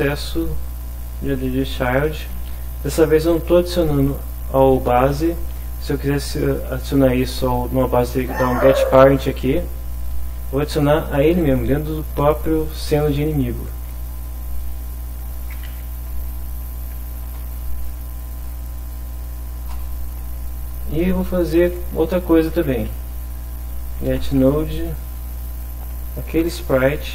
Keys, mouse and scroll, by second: 1.3 a, 1.6 d, 2.3 shift+-, 14.6 Return, 15.4-17.8 typing, 17.2 Return, 19.7 Return, 22.3-24.3 typing, 25.0 Return, 25.5 shift+', 26.4 shift+s, 26.6 shift+p.